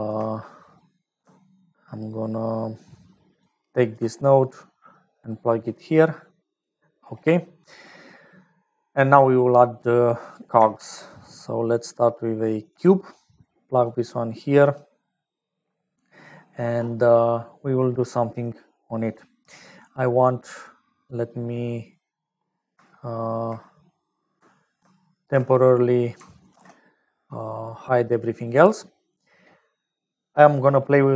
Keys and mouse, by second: 3.4 alt+click, 5.1-6.9 drag, 7.3 click, 7.3 right click, 8.4 click, 8.4 right click, 9.9 click, 10.7 shift+a, 13.8 click, 21.1 middle click, 24.9 ctrl+alt+click, 26.5 ctrl+s, 27.2 click, 27.8 click, 30.0-31.1 drag.